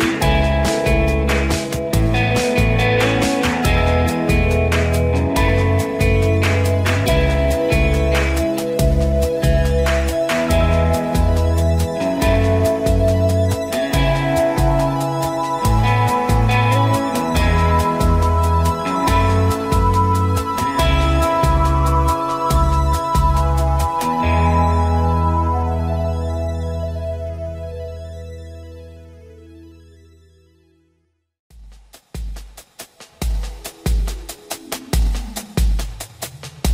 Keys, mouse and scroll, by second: 0.0 click, 5.1 click, 28.7 click, 31.2 click, 31.9 ctrl+-, 33.9 ctrl+=, 35.9-36.7 ctrl+drag.